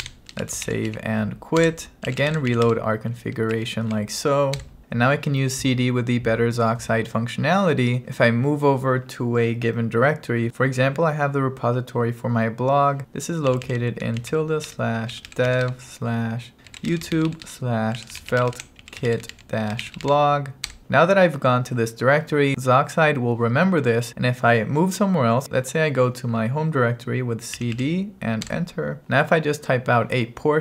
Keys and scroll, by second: 0.0-3.0 typing, 1.7 Return, 3.6 Right, 4.6 Return, 13.0-20.5 typing, 27.3-28.3 typing, 28.6 Return.